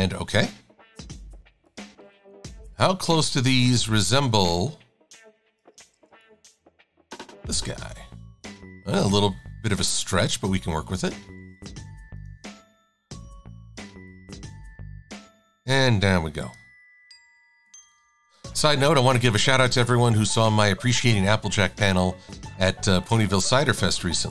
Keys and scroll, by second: 1.3 e, 3.9 super+z, 6.0 a, 7.4 e, 22.3 a, 24.2 e.